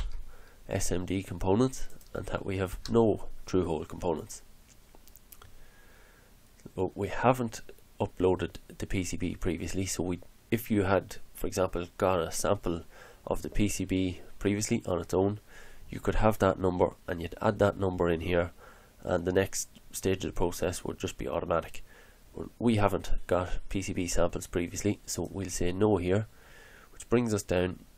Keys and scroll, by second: 0.0 4, 2.7 0.